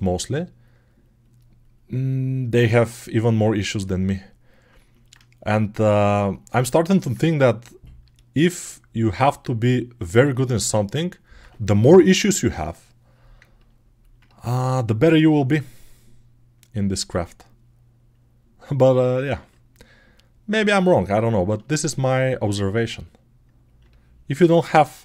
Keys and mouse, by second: 6.6-10.6 alt+right drag, 14.4-21.9 drag, 14.9 g, 19.0 alt+middle click, 21.6 alt+right click, 21.9 alt+right click, 22.0-25.0 alt+drag.